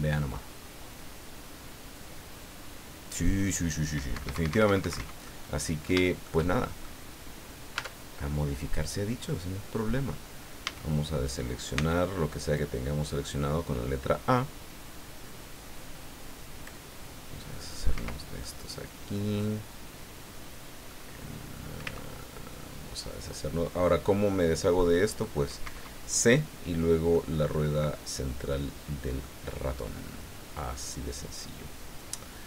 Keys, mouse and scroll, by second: 4.1 Escape, 5.2 click, 7.7 Tab, 8.2-9.9 drag, 10.0 middle click, 10.6 a, 11.7 c, 12.5-16.9 drag, 17.4 middle click, 17.9 Escape, 18.4 middle click, 19.4-21.0 middle drag, 21.8 c, 22.2-24.2 middle drag, 24.8 middle click, 25.6 Escape, 27.1-28.6 drag, 28.8 scroll down 1, 29.2-32.4 drag.